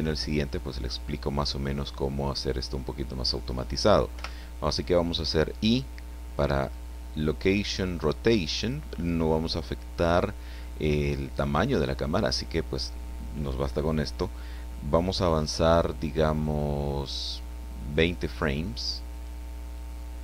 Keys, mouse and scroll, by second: 4.1 i, 8.5 click, 19.1 click.